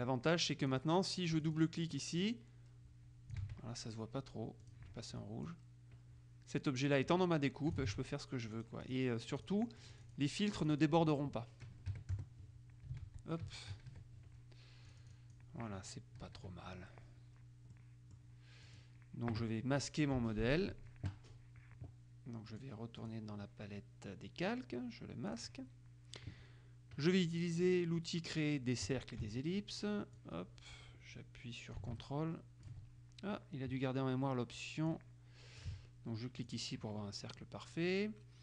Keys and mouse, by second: 0.8 click, 1.6-2.6 drag, 3.6 ctrl+z, 4.8 click, 5.6-8.4 drag, 8.0 ctrl+z, 8.7-10.8 drag, 12.1 KP_Subtract, 12.3 KP_Add, 13.2 ctrl+z, 15.1 click, 16.3 KP_Subtract, 17.9-19.4 drag, 22.7-23.7 drag, 25.4 click, 29.1 click, 30.3-33.3 drag, 35.1-36.3 drag, 36.7 click.